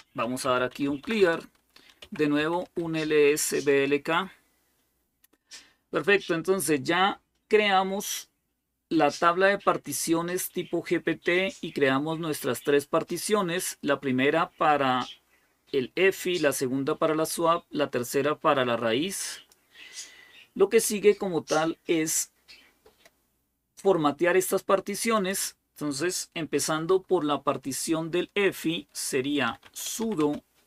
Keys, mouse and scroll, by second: 0.0-3.1 typing, 3.5 Return, 19.1 click, 19.8-24.9 scroll down 2, 24.9 click, 29.4-30.6 typing.